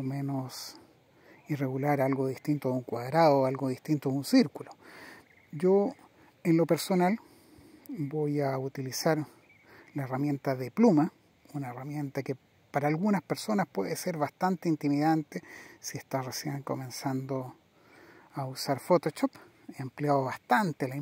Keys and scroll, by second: 1.6 super++, 9.5 super++.